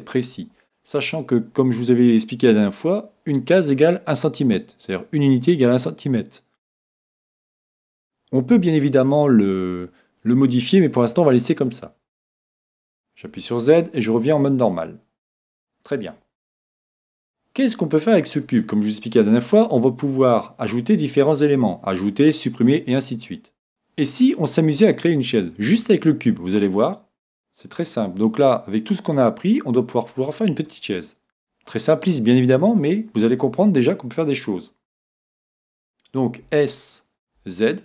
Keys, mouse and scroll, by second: 11.9-18.4 middle drag, 13.3 z, 30.3-32.3 middle drag.